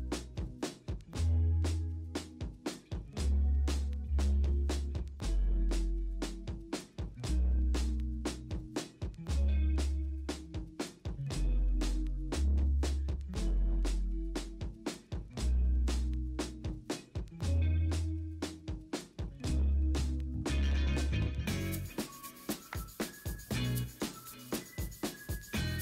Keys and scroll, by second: 0.2 ctrl+d, 1.0 b, 1.5 x, 2.1 ctrl+z, 7.5-8.0 typing, 7.9 ctrl+z, 11.2 ctrl+alt+shift+e, 21.4-21.9 typing, 21.8 ctrl+z.